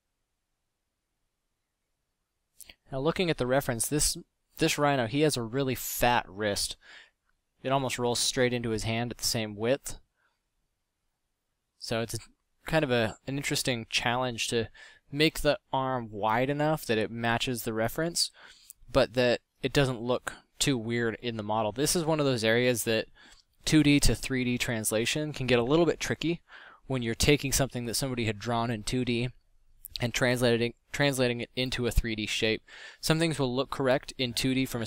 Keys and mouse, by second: 0.0-0.7 middle drag, 14.0 f, 16.9 f, 22.5 f.